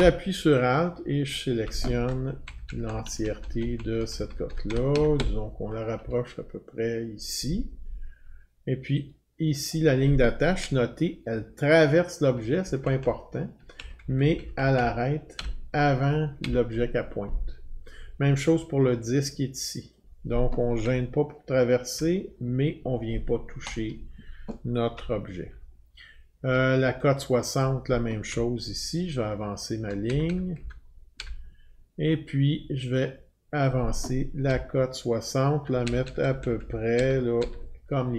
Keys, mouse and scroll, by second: 1.3 alt+click, 2.5 Right, 2.7 Right, 2.9 Right, 3.1 Right, 3.2 Right, 3.4 Right, 3.6 Right, 3.8 Right, 3.9 Right, 4.1 Right, 4.3 Right, 4.5 Right, 4.7 Right, 4.9 Right, 5.2 Right, 6.0 Right, 9.7 click, 10.6-12.3 Right, 12.6 Right, 12.8 Right, 13.0 Right, 13.5 Right, 13.5 Right, 13.6 Right, 13.8 Right, 14.0 Right, 14.2 Right, 14.4 Right, 14.6 Right, 14.8 Right, 15.4 Right, 16.0 Left, 16.4 Right, 19.9 click, 20.9-22.0 Right, 23.7 click, 25.0-26.1 alt+scroll, 27.6 click, 28.3-29.9 Right, 30.1 Right, 30.3 Right, 30.6 Right, 31.2 Right, 33.7 click, 34.5-35.6 Right, 35.8 Right, 36.0 Right, 36.2 Right, 36.4 Right, 36.6 Right, 37.0 Right, 37.4 Right.